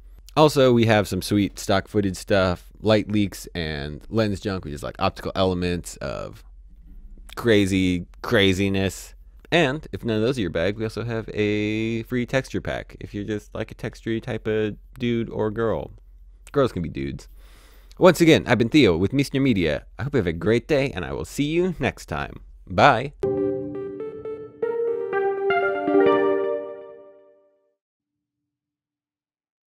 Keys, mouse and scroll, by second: 0.1 click.